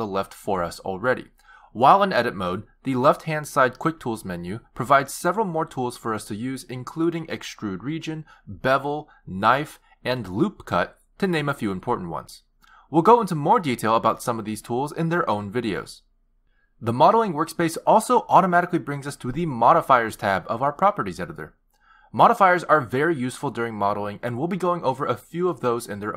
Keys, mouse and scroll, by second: 1.0-2.2 scroll up 2, 3.2 t, 4.1 t, 6.0-7.0 scroll down 4, 22.6 click.